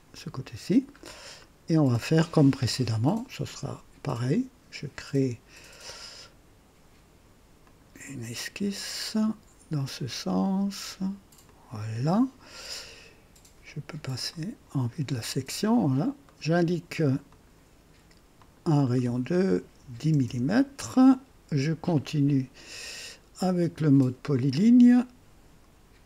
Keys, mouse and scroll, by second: 0.0 click, 1.0 scroll up 2, 1.4-2.8 right drag, 4.9 click, 7.6 click, 9.1 click, 11.5 click, 14.3 click, 15.1 scroll up 2, 15.5 right click, 16.3 right click, 17.3 click, 18.4 click, 19.8 KP_1, 20.0 KP_0, 20.2 KP_Enter, 24.3 click.